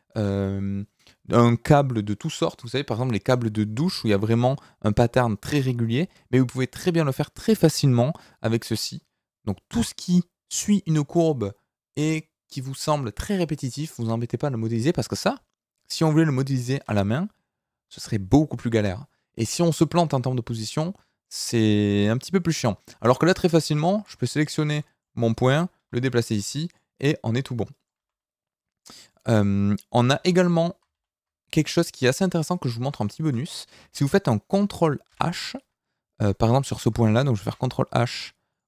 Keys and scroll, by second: 22.4 Tab, 25.8 g, 30.1 alt+h, 30.9 ctrl+h, 32.2 Tab, 35.0 ctrl+h.